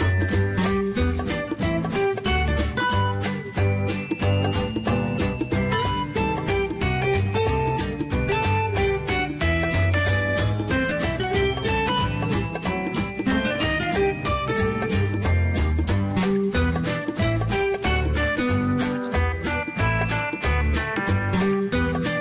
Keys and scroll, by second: 1.6 Escape.